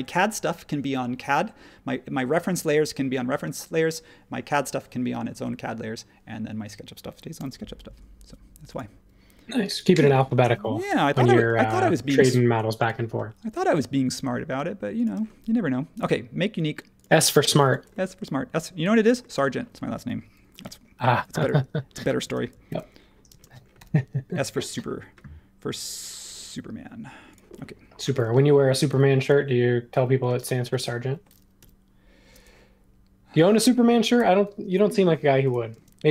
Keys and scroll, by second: 7.3 m, 9.9 space, 10.9 m, 15.1 space, 20.6 i, 22.2 space, 22.7 super+1, 23.3 space, 28.2 space, 31.6 m, 35.7 shift+space.